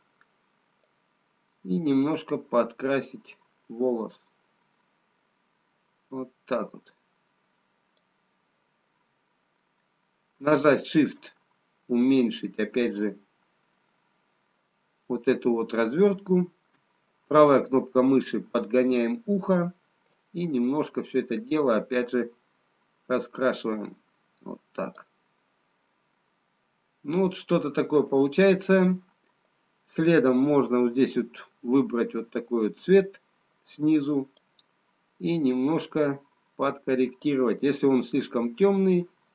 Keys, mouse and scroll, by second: 3.0 click, 12.0 shift+right click, 20.3 click, 25.9 middle click, 29.4 right click, 36.4 click.